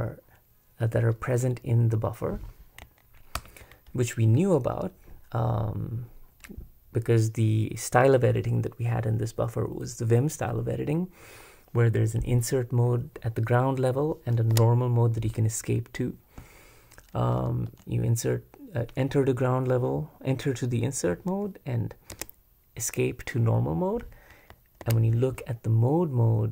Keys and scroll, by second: 3.4 super+Return, 14.5 Escape, 17.7 Return, 22.1 Escape, 24.8 super+Escape.